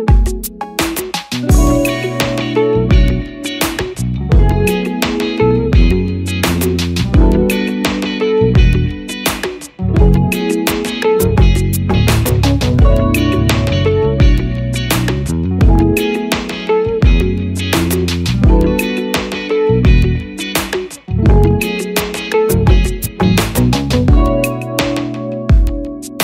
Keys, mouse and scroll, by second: 12.8 double click.